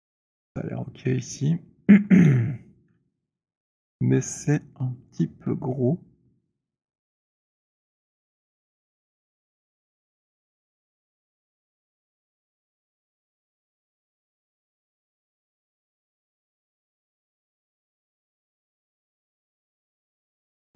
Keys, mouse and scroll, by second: 2.0 middle click, 2.2 f, 5.0 alt+click, 6.5 middle click, 8.4 alt+click, 8.4 middle click, 9.1 r, 10.0 middle click, 10.4 middle click, 10.9 alt+middle click, 11.4 middle click, 11.7 middle click, 13.7-14.1 scroll, 17.3 click, 17.9 w, 18.5-19.5 scroll, 19.5-20.7 alt+middle click, 19.7-20.1 scroll, 20.1 middle click.